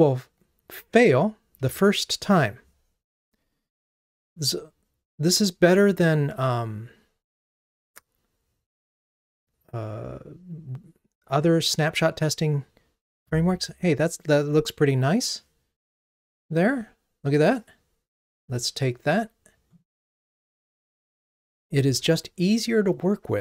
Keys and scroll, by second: 1.6 ctrl+r, 21.8 ctrl+r.